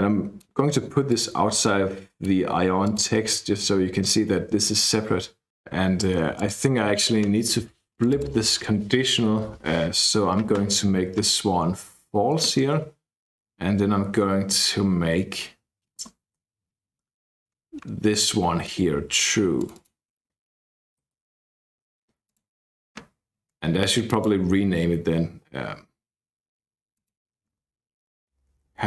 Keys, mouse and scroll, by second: 1.0-2.7 drag, 2.8 click, 6.3 click, 7.9 click, 8.9-10.0 typing, 12.5-13.5 scroll down 2, 14.8-15.3 scroll down 2, 15.3-16.2 scroll up 2, 16.6-18.5 scroll up 2, 19.5 click, 20.0-21.6 typing, 22.2 click, 26.9 click, 28.3 Left, 28.5 Right, 28.6 Right.